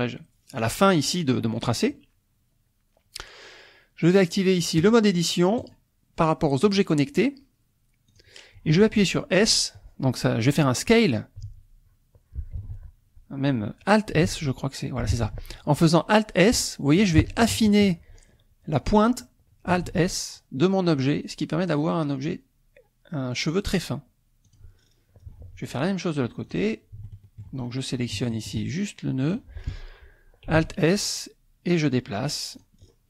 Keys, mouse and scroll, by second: 4.8 click, 5.6 click, 6.7 click, 8.1 click, 11.4 s, 12.6 Escape, 14.2 alt+s, 15.1 Escape, 16.0-17.4 middle drag, 17.4 shift+click, 18.1-18.5 shift+scroll up 3, 19.8 alt+s, 24.5 click, 25.2 scroll down 2, 26.6 click, 27.0 shift+middle click, 28.0 scroll up 2, 28.2 shift+click, 29.4 click, 30.6 alt+s, 32.6 click, 32.8-33.0 scroll down 2.